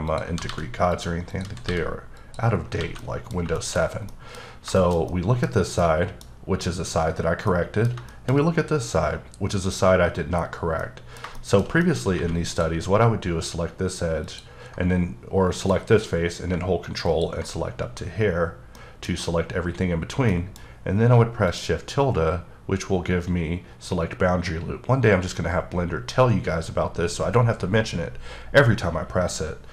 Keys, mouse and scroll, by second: 0.1 click, 0.3 g, 0.5 g, 0.9 click, 1.3 click, 1.4 g, 1.6 g, 2.2 click, 2.6 click, 2.6 scroll down 3, 2.8 alt+a, 3.0 middle click, 3.8 scroll down 2, 4.1 middle click, 4.8 double middle click, 5.1 middle click, 5.8 middle click, 7.5 middle click, 8.1 shift+middle click, 8.3-10.5 scroll up 3, 10.5 scroll down 2, 10.8 middle click, 12.1 3, 12.5 click, 18.7 middle click, 20.3 middle click, 21.4 click.